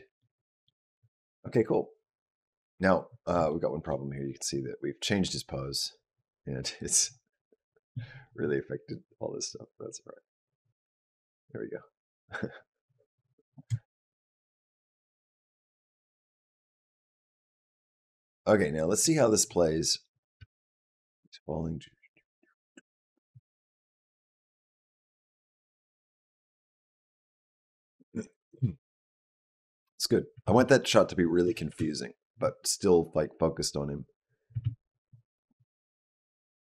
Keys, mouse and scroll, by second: 0.0 middle click, 1.1 click, 3.3 shift+middle click, 4.4 click, 6.9-7.8 scroll down 6, 7.8 middle click, 8.8 click, 13.6 shift+middle click, 14.6 click, 20.0 click, 20.3 space, 23.3 space, 23.8 click, 24.0 space, 27.0 space, 27.3 click, 27.5 space, 30.3 space, 31.3 click, 31.6 space, 34.4 space, 35.0 click.